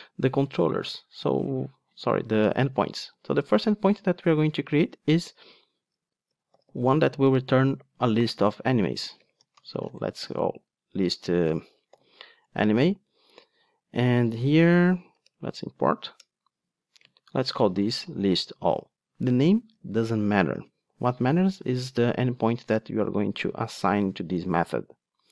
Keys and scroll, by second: 12.5 Return, 15.3 alt+Return.